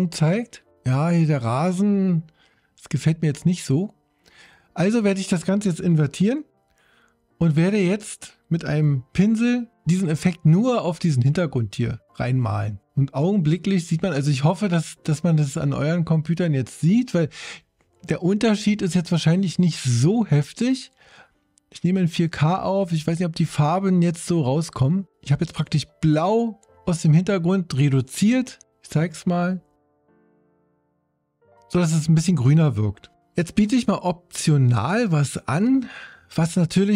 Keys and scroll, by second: 6.2 super+i, 9.2 b.